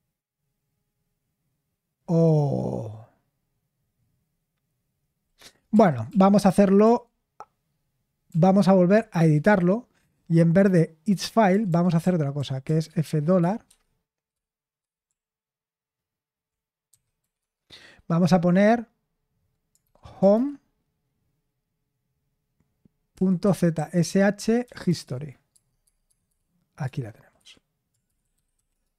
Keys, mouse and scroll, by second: 5.7 ctrl+p, 6.1 ctrl+p, 6.8 ctrl+p, 8.2 ctrl+p, 9.1 Return, 10.0-13.0 typing, 13.6 Escape, 14.8-17.3 typing, 19.8-20.3 typing, 23.1-24.4 typing, 24.6 Down, 24.8 Down, 25.0 Down, 25.5 Tab, 25.8 Tab, 26.0 Tab, 26.2 Tab, 26.8 Return, 27.3 Escape, 27.8-28.9 typing.